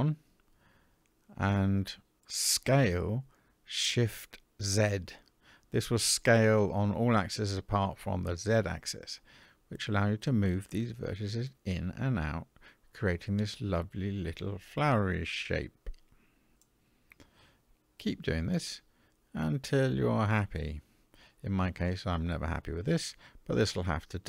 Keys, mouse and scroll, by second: 2.4 s.